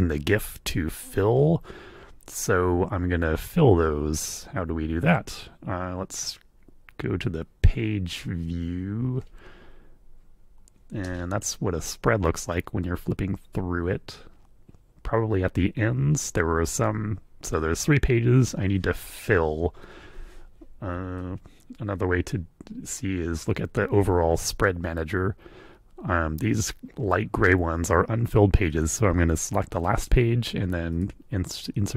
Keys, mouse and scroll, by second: 11.0 space, 19.8 F3, 21.1-23.1 super+drag, 28.7 click, 30.0 click, 30.9 click, 31.8 click.